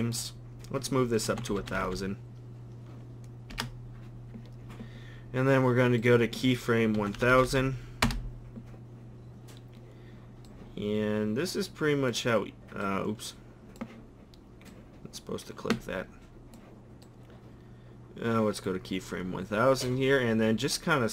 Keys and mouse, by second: 1.7 0, 1.8 0, 7.3 0, 7.5 0, 12.4 middle click.